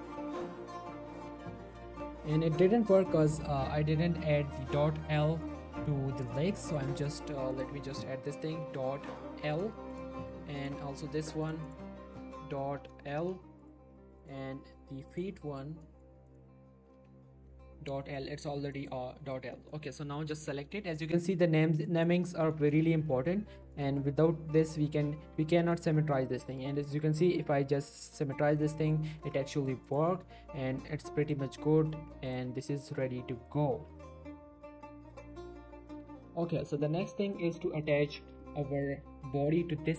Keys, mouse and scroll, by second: 2.2 ctrl+Num_Lock, 2.2 click, 4.5 g, 4.7 right click, 5.4 click, 9.5 shift+l, 9.9 click, 13.2 shift+l, 13.6 click, 15.8 middle click, 16.3 click, 18.6 click, 18.7 shift+middle click, 19.7 shift+click, 21.2 shift+middle click, 22.0 shift+click, 22.3 shift+middle click, 22.4 shift+scroll up 1, 22.9 shift+middle click, 23.2 right click, 23.8 shift+middle click, 24.8 right click, 25.7 click, 25.8 click, 26.2 shift+middle click, 28.6 middle click, 29.2 Tab, 29.5 middle click, 30.0 click, 30.1 middle click, 30.2 scroll up 1, 30.4 r, 30.8 right click, 31.2 click, 31.4 r, 31.5 right click, 31.8 middle click, 32.3 click, 32.4 r, 32.9 right click, 33.5 click, 33.7 g, 34.3 right click, 34.6 click, 34.7 r, 35.3 right click, 37.9 click, 38.2 z, 38.4 shift+middle click, 38.8 click, 39.1 g, 39.3 right click.